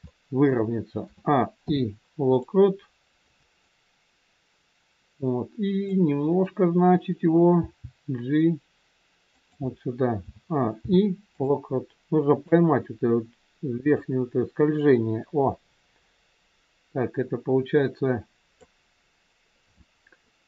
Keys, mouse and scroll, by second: 0.0 shift+middle click, 1.0 a, 1.5 i, 3.6 click, 7.6 g, 10.1 a, 10.7 i, 12.4 click, 19.0 scroll down 2.